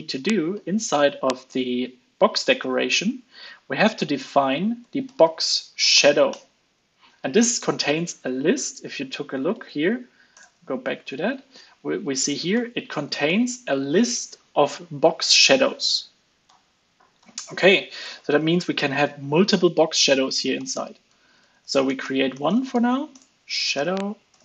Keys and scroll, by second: 9.5 super+b, 10.5 super+b, 12.5 alt+shift+Left, 12.7 alt+shift+Left, 12.9 alt+shift+Left, 16.4 alt+super+Left, 17.2 alt+Right, 18.3 alt+5.